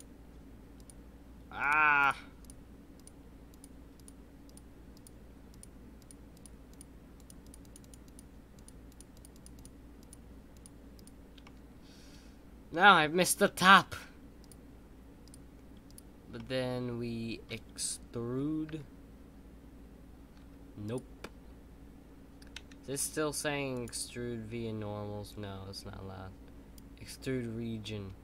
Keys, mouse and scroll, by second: 11.4-13.6 middle drag, 13.6 shift+click, 16.3-18.6 middle drag.